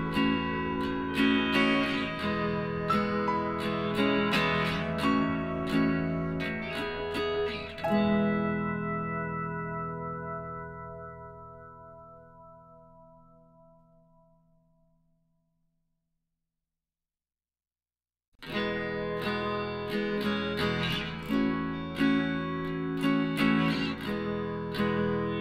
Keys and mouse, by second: 2.6 Tab, 2.9-5.3 middle drag, 3.3 a, 6.8 shift+s, 8.2-10.1 middle drag, 10.1 right click, 10.5 Tab, 11.0 KP_1, 11.6 z, 11.9 middle click, 14.4 click, 15.5 ctrl+r, 17.7 b, 19.0 g, 20.9-22.7 drag, 22.7 ctrl+r, 23.9-25.4 right drag, 24.6 b.